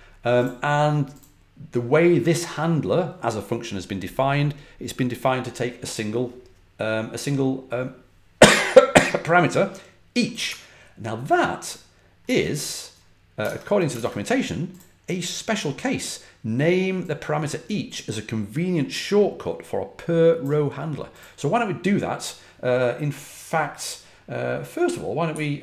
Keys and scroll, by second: 12.1 super+Tab, 13.3 super+Tab, 13.8 super+Tab, 25.2-25.6 typing.